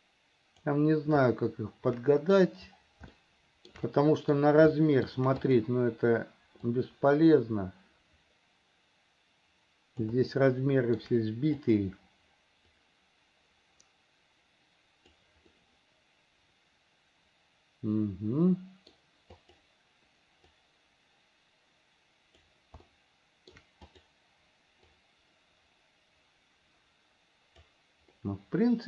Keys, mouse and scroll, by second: 1.4-2.6 shift+middle drag, 3.3 shift+middle click, 4.2 middle click, 5.0 shift+middle click, 5.7 click, 7.0-10.4 drag, 10.6 shift+middle click, 11.8 click, 12.9 click, 13.2-15.4 drag, 15.7-19.2 middle drag, 19.6 click, 20.8-22.7 drag, 23.1 shift+middle click, 24.1 click, 25.2-28.0 drag, 28.4-28.8 middle drag.